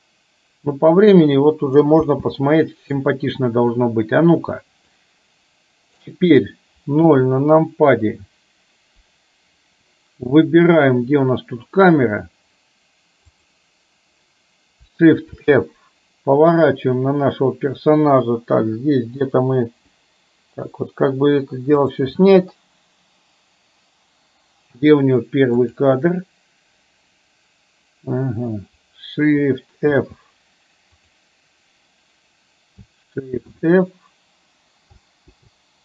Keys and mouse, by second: 0.1-1.2 middle drag, 2.0 space, 2.5-3.0 middle drag, 5.0-6.1 drag, 7.0 KP_0, 13.4 click, 15.4 shift+f, 25.9 click, 30.0 shift+f, 33.5 shift+f.